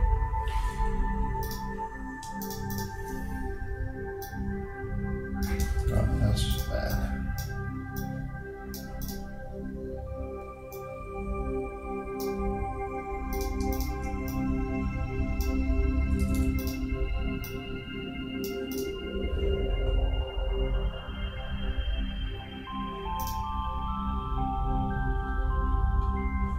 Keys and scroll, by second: 5.9 super+z.